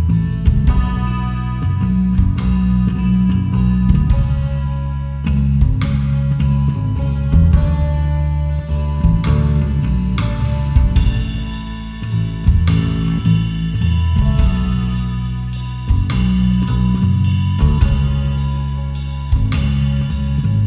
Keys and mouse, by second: 0.3 alt+shift+click, 3.1 alt+shift+click, 3.6 alt+shift+click, 4.8 alt+shift+click, 5.3 alt+shift+click, 5.9 alt+shift+click, 8.8 alt+shift+click, 10.3 alt+shift+click, 11.4 alt+shift+click, 12.1 alt+shift+click, 14.7 alt+shift+click, 15.5 alt+shift+click.